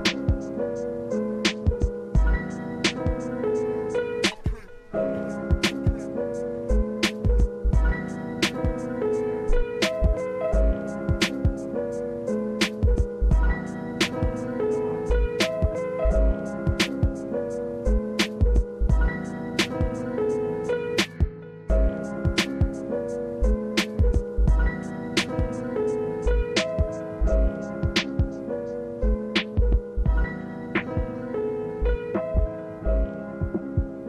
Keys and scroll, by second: 1.3 space, 4.5 space, 5.7 space, 7.7 space, 8.3 space, 9.0 space, 9.7 s, 11.7 space, 11.9 s, 12.9 s, 13.5 space, 14.6 space, 15.4 s, 16.6 space, 19.4 space, 21.4 s, 21.9 space, 23.5 space, 24.9 space, 29.5 space, 30.7 space, 31.2 space, 31.8 space, 32.3 space, 33.7 space.